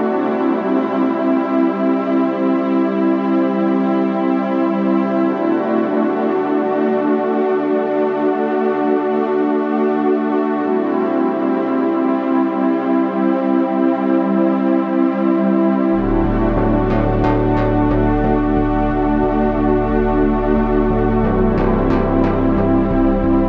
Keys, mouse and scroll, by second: 13.0 KP_1, 20.8 ctrl+z.